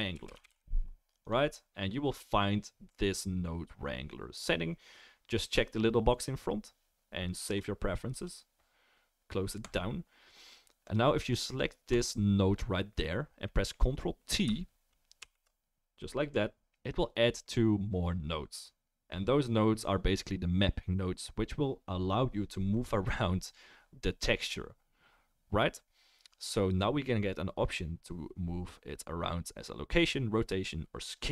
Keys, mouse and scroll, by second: 9.7-10.9 drag, 9.7-14.4 middle drag, 9.7-14.4 right drag, 11.9 click, 15.2 ctrl+t, 27.2 click, 30.2-31.3 right drag.